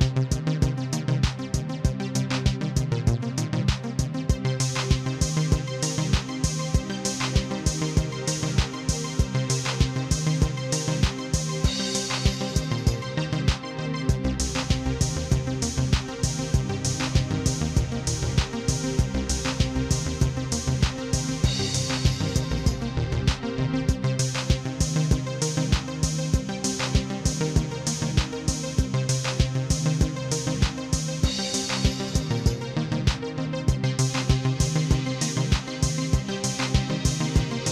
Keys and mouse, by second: 0.4 click, 2.5 click, 4.8 click, 5.9 click, 6.8 click, 8.2 click, 9.7 click, 10.7 click, 11.7 click, 13.9 click, 14.8 click, 15.3 click, 15.8 click, 16.5 click, 18.6 click, 19.7 click, 20.5 click, 22.2 click, 24.7 click, 25.9 click, 27.8 click, 29.4 click, 30.4 click, 31.4 click, 32.7 click, 33.9 click, 35.8-37.7 drag.